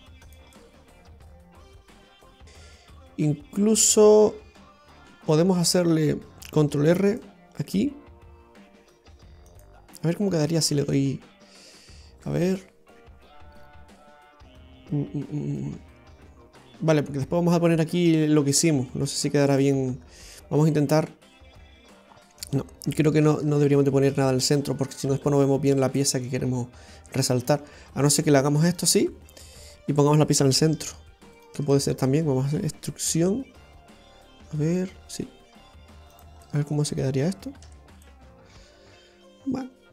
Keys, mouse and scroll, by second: 0.6 middle click, 2.4 Tab, 2.4 scroll up 3, 6.8 ctrl+r, 10.2 right click, 17.1-18.6 scroll down 3, 20.1-20.4 scroll up 2, 20.4 middle click, 23.3-23.6 ctrl+z, 23.8 ctrl+z, 24.2 ctrl+z, 24.5 ctrl+z, 24.8 ctrl+z, 25.4-26.1 scroll down 2, 25.7 middle click, 28.7 ctrl+right click, 29.6 right click, 31.4 shift+right click, 31.8 middle click, 36.5 middle click, 36.9 right click, 37.7 Tab, 38.1 middle click.